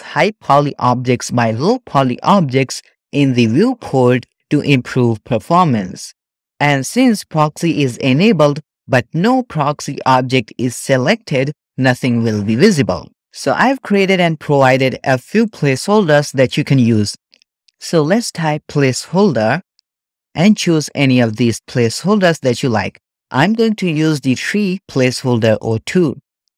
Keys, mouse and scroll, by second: 15.4-16.8 shift+middle drag, 15.4-15.7 shift+scroll down 1, 16.9-18.2 shift+middle drag, 18.2-26.2 drag.